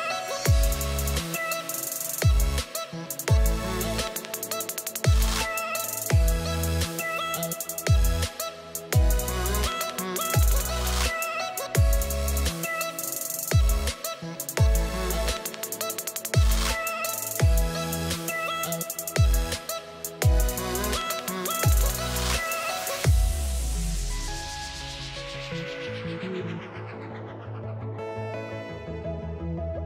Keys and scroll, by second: 8.7 ctrl+z, 18.9 space, 19.6 ctrl+v.